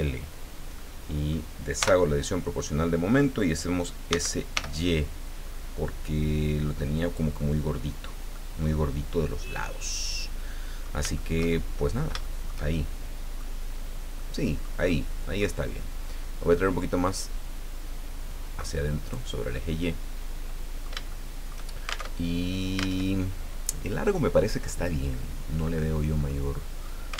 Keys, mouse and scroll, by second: 0.8 middle click, 1.8 o, 4.1 s, 4.5 y, 7.0 click, 7.4 middle click, 8.3-11.0 middle drag, 11.1-12.2 shift+middle drag, 12.2-13.5 shift+middle drag, 14.2 middle click, 14.9 middle click, 17.1-19.3 drag, 19.5-21.0 drag, 21.1 shift+click, 22.1 alt+shift+Tab, 23.0 alt+Tab, 26.2 click.